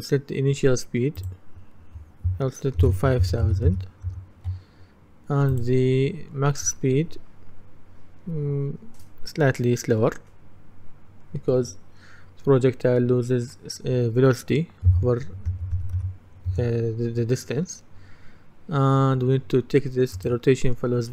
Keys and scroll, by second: 2.9 KP_5, 4.1 Return, 14.9 KP_4, 16.6 Return.